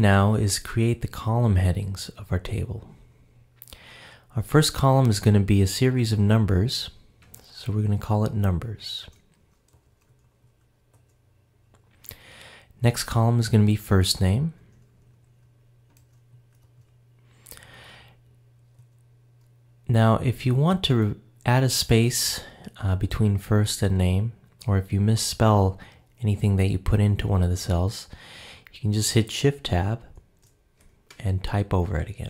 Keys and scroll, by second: 30.1 shift+Tab.